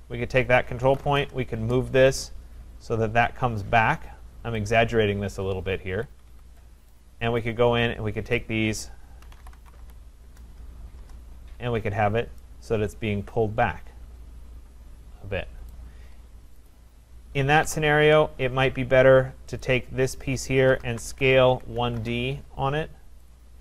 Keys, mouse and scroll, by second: 0.6-1.5 typing, 2.2 click, 4.7 click, 5.6-6.2 scroll, 6.0 Escape, 6.2 Escape, 6.3 Escape, 7.0 right click, 8.4 click, 9.0-10.5 typing, 10.0 middle click, 11.0 Return, 12.1 middle click, 12.8-13.6 typing, 15.7 right click, 16.7 click, 17.7 Delete, 18.4-19.1 scroll, 19.1-19.6 scroll, 19.6 click, 20.4-22.5 typing, 23.3 click.